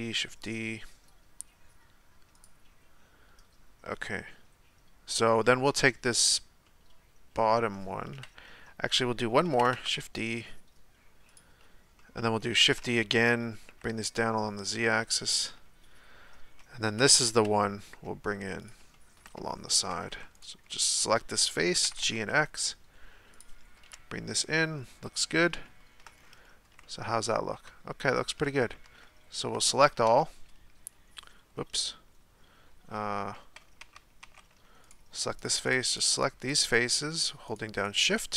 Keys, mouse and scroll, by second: 5.4-8.1 shift+middle drag, 8.1 KP_1, 9.4 shift+d, 12.0-12.6 shift+middle drag, 12.6 shift+d, 15.5-16.9 scroll up 1, 16.9 g, 18.9-20.1 shift+middle drag, 20.1 3, 20.3 right click, 20.7-21.7 middle drag, 21.7 g, 23.8 KP_1, 24.9 scroll up 1, 25.1-25.6 scroll down 1, 25.6 shift+middle click, 26.0-26.8 scroll down 4, 26.8-28.8 shift+middle drag, 28.8 Tab, 29.5 Tab, 30.0 a, 33.8 Tab, 34.2 Tab, 34.8 right click, 35.4 shift+right click, 35.6 shift+right click, 35.9 shift+right click, 36.1 shift+right click, 36.4 shift+right click, 36.6 shift+right click, 36.9 shift+right click, 37.2 shift+right click, 37.5 shift+right click, 37.7 shift+right click, 38.0 shift+right click.